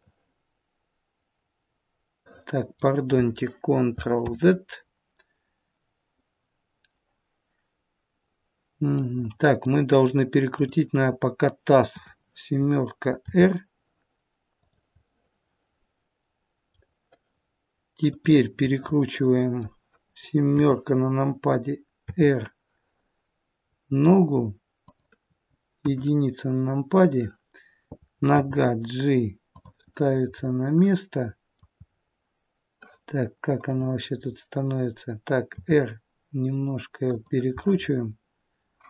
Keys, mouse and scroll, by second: 2.4 middle click, 4.3 ctrl+z, 9.0 middle click, 10.5 click, 11.9 KP_7, 13.3 r, 16.2 middle click, 18.1 click, 18.8 middle click, 20.5 KP_7, 22.1 r, 25.9 KP_1, 28.4 g, 29.9 middle click, 31.7-32.5 scroll up 1, 32.8-33.6 scroll up 1, 33.6 click, 34.1-34.9 scroll down 2, 35.4 r, 37.6 middle click.